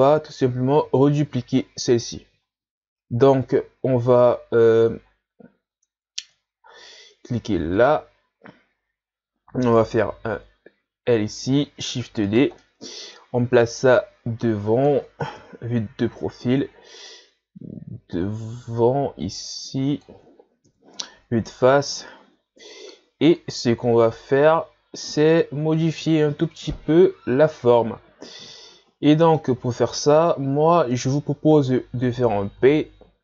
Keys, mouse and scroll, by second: 0.2-1.0 scroll down 2, 1.0-2.4 scroll up 1, 2.4-3.8 scroll up 5, 3.8 shift+scroll down 1, 4.6-5.0 scroll down 8, 5.0 scroll up 4, 5.7 Tab, 6.1-6.4 scroll down 2, 6.4-7.8 shift+scroll up 2, 7.8 click, 8.7-9.2 scroll up 1, 9.7 right click, 10.1 l, 11.9 shift+d, 12.6-13.9 middle drag, 13.9-15.4 drag, 15.4 KP_3, 16.2-17.1 scroll up 1, 17.1-20.1 drag, 20.6 KP_1, 21.6 ctrl+scroll up 4, 24.0-25.2 shift+scroll up 4, 28.5-31.5 middle drag, 32.6 p.